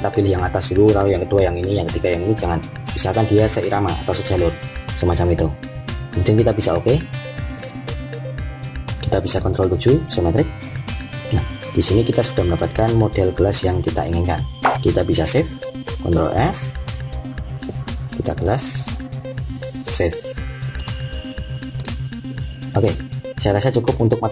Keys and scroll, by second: 9.4 7, 16.2 s.